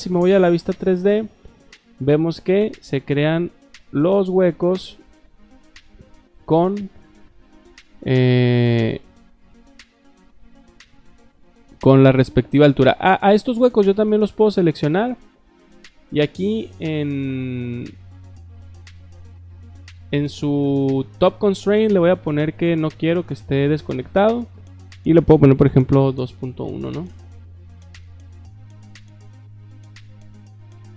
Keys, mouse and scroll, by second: 0.0 click, 3.4 middle click, 4.1 shift+middle click, 5.0 middle click, 6.5 scroll down 2, 6.9 scroll up 2, 14.3 click, 21.5 click, 22.2 click, 23.2 click, 24.2 drag.